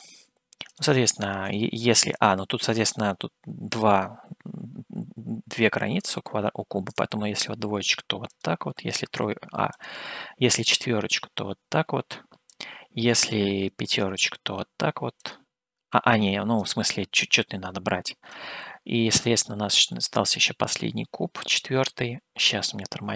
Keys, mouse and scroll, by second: 1.0-14.2 drag, 15.4-18.5 drag, 18.7-23.1 middle drag.